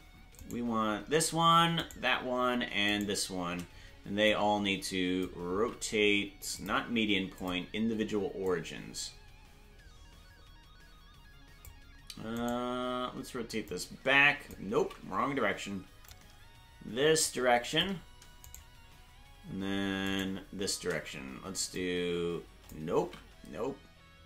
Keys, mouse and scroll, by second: 2.1 shift+right click, 3.2 right click, 4.2-5.2 drag, 6.1 ctrl+z, 6.5 click, 8.4-11.7 drag, 12.7 right click, 13.6 click, 15.3 ctrl+z, 16.0-17.8 drag, 18.8 shift+right click, 21.7 click, 21.7 shift+right click, 23.5 ctrl+z.